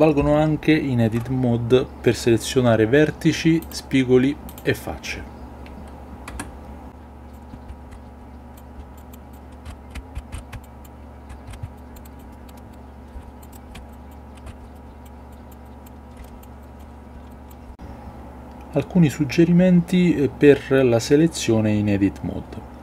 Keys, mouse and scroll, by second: 3.7-4.9 drag, 6.2 Tab, 7.3 click, 7.6 KP_Divide, 7.8 Tab, 9.6-11.5 typing, 11.2 Tab, 12.0 click, 12.3 middle click, 12.5 middle click, 13.1 l, 13.4 click, 13.7 l, 13.9 click, 14.4 a, 14.5 a, 14.7-15.0 drag, 15.3 click, 15.6 click, 16.2 shift+click, 16.6 shift+click, 17.2 ctrl+click.